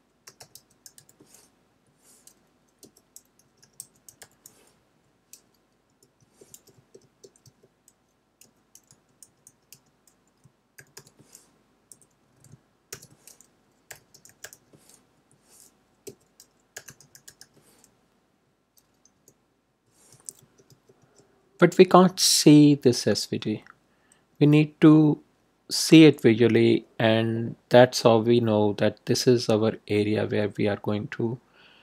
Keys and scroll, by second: 0.0-1.4 typing, 1.7 Right, 2.7-4.6 typing, 4.8 Right, 5.9 Return, 6.1 Tab, 8.1-11.4 typing, 11.8 Left, 12.8-15.0 typing, 15.1 Right, 16.0-17.8 typing, 18.2 Right, 19.1 Return, 19.6 Tab.